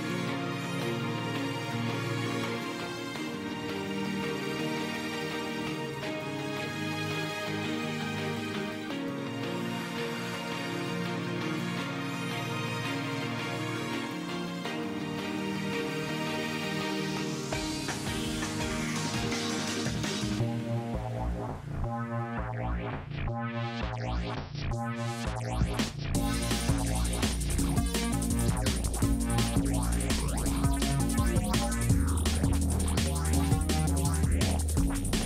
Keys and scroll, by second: 19.5 space, 23.4 space.